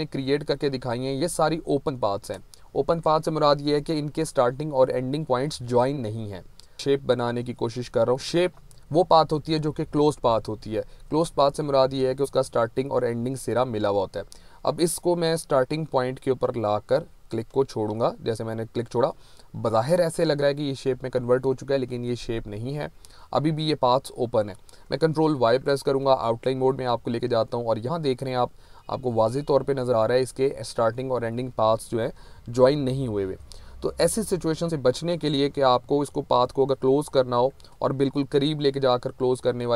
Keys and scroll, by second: 2.7 ctrl+a, 3.6 Delete, 25.4 ctrl+y, 28.4 z, 32.2 ctrl+-, 34.1 ctrl+-, 36.6 ctrl+-.